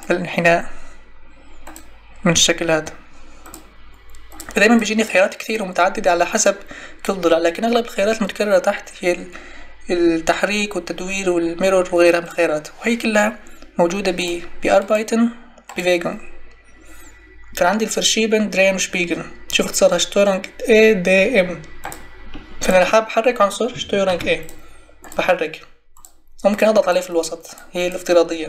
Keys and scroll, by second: 24.0 ctrl+e.